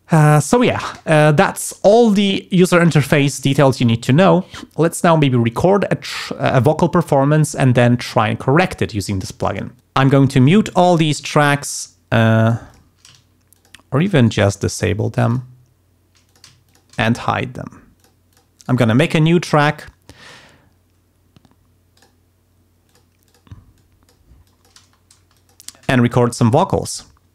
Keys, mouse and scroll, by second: 9.8 click, 10.4 click, 10.9 click, 11.5 click, 12.7 click, 13.5 shift+click, 14.2 shift+right click, 15.3 click, 16.3 shift+click, 16.7 shift+click, 17.0 shift+right click, 18.0 click, 18.3 click, 18.6 right click, 22.0 click, 22.9 click, 23.3 click, 23.8 click, 24.5 click, 24.8 space, 25.4 click.